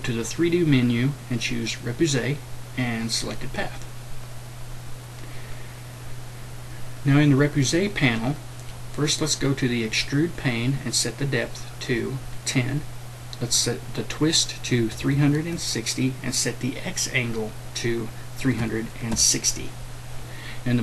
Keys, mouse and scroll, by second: 14.8 KP_3, 17.3 click, 18.4 KP_3.